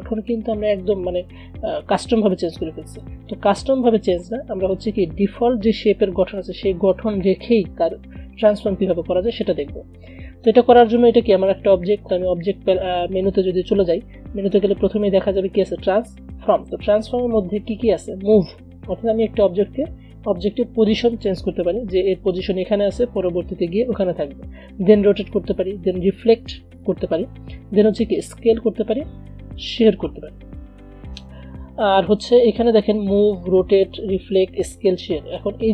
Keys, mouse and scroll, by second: 3.1 click, 4.2 v, 4.8 click, 14.7 click, 14.8 click.